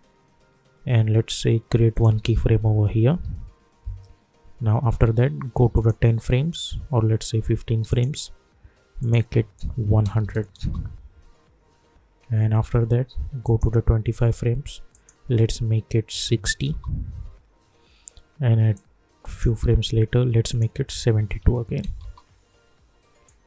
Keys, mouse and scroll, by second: 1.9 click, 3.1 =, 3.4 =, 5.7 click, 10.6 Return, 13.4 click, 16.6 Return, 18.7-20.5 drag, 22.0 Return, 23.2 click.